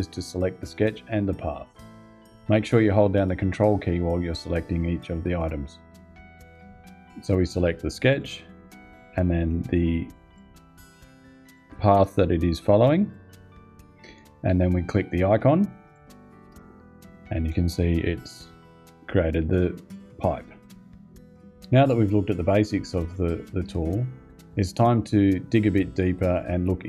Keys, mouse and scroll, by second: 7.8 click, 10.0 ctrl+click, 11.2 ctrl+click, 12.7 ctrl+click, 15.6 click.